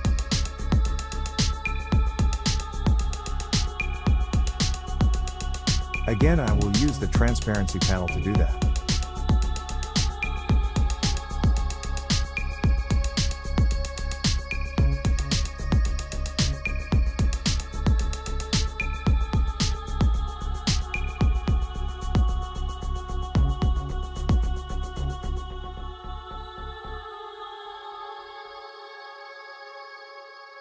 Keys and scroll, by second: 18.1 ctrl+x, 20.6 ctrl+f, 29.3 ctrl+f.